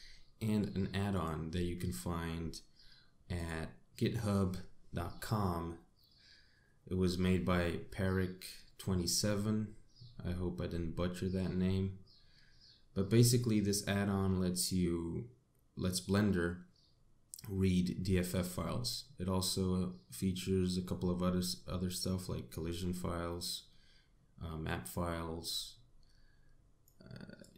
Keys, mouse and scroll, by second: 1.0 click.